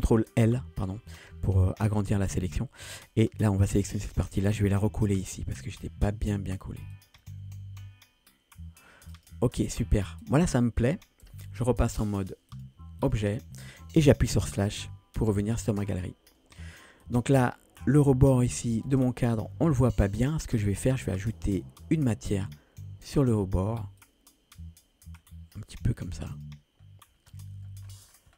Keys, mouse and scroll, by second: 0.5 ctrl+l, 1.6 middle drag, 3.1-3.5 middle drag, 4.1 g, 7.4-8.9 middle drag, 9.2 click, 9.6 scroll down 1, 9.9 middle click, 10.3 click, 11.3 Tab, 12.5-13.2 drag, 14.8 KP_Divide, 15.8 middle click, 17.0 click, 17.6-18.6 scroll up 2, 19.0 ctrl+space, 19.8 click, 20.9 click, 22.0 click, 26.3 click, 26.8-27.3 scroll up 3, 27.6 middle drag, 27.9-28.3 scroll down 5.